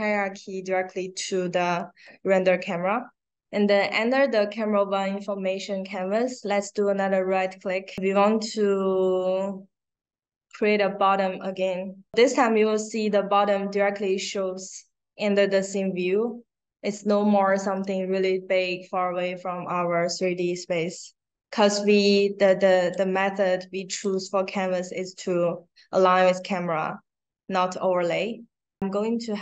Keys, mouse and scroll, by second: 5.9 right click, 10.4 click, 20.7-22.8 drag, 23.8 click, 26.5 click, 28.8-29.4 drag.